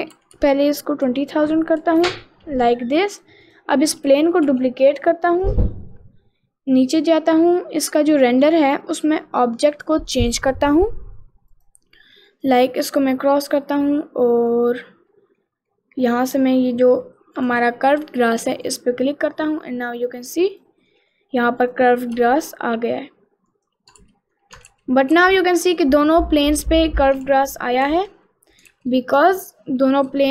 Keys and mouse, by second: 0.4 0, 2.7 middle click, 3.1 click, 3.5 click, 4.5 shift+d, 11.6 click, 12.8 click, 13.8 middle click, 14.4 middle click, 15.1 middle click, 15.7 middle click, 17.5 click, 19.7 middle click, 21.0 middle click, 21.7 click, 22.2 g, 24.1 ctrl+z, 24.8 ctrl+z, 25.2 ctrl+z, 27.3 ctrl+z, 27.9 ctrl+z, 28.3 middle click, 28.8 ctrl+z, 29.3 middle click, 30.1 g.